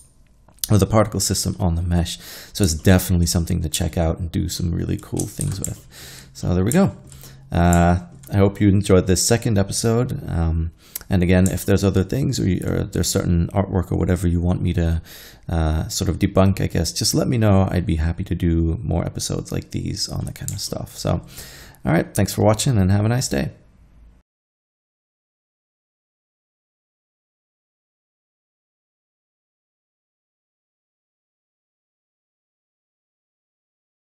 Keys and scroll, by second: 5.5 shift+c.